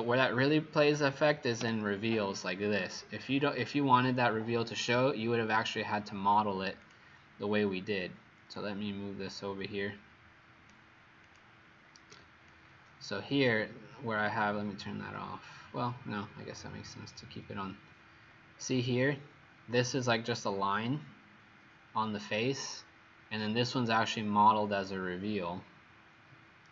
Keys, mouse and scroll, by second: 1.6 Delete, 6.9 click, 12.1 y, 12.5 click, 16.5-17.5 scroll up 15, 18.5 middle click.